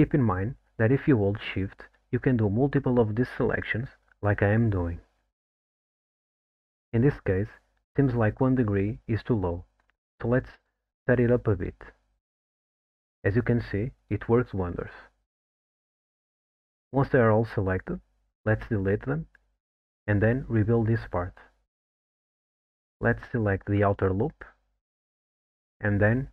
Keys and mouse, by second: 0.8 click, 3.4 shift+click, 9.9-13.7 drag, 15.0 shift+click, 16.8 middle click, 19.2 x, 21.1 alt+middle click, 22.1-23.0 middle drag, 24.0 middle drag, 24.4 2, 25.4 alt+click.